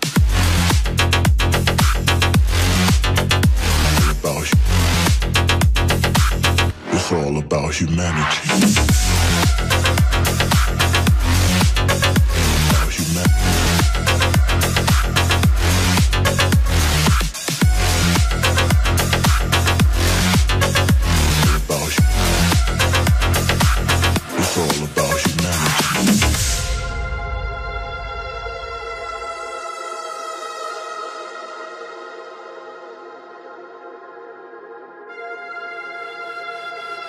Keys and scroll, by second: 3.1 Tab, 7.1 BackSpace.